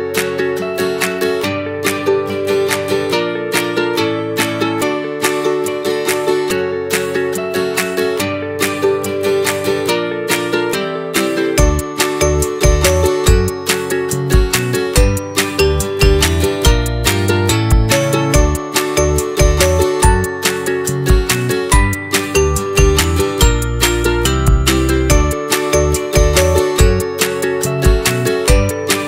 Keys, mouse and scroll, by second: 2.6 middle click, 3.0 scroll down 1, 3.2-4.4 middle drag, 4.4 g, 6.8 middle click, 7.8 click, 8.1 middle click, 8.8 f, 9.5-10.7 right drag, 10.7 g, 13.9 scroll down 2, 14.2-15.4 middle drag, 15.4-16.2 scroll down 2, 16.2-16.5 scroll up 1, 16.5 click, 17.1 middle click, 18.0 g, 20.1 click, 20.9-22.7 middle drag, 22.7 click, 23.3 click, 25.0 click, 26.0 click, 26.7 middle click, 27.6-29.0 scroll up 4.